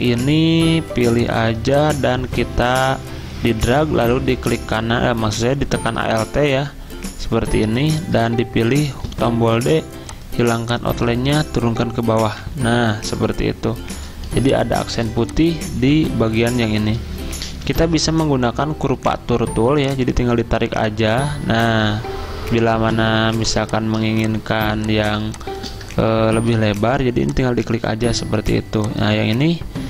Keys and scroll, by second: 3.1 r, 8.9 d, 12.4 ctrl+[, 17.6 ~, 23.4 z, 26.4 ~.